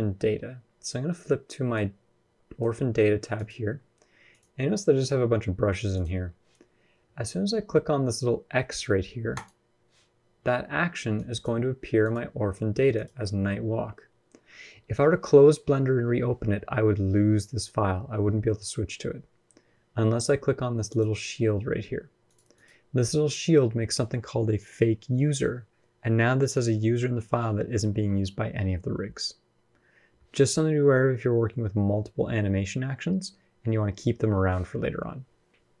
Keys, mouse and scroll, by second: 4.1 click, 5.7 click, 9.1 click, 11.8 click, 12.7 click, 20.6 click, 22.0 click, 22.3 click, 35.1-35.8 scroll up 3.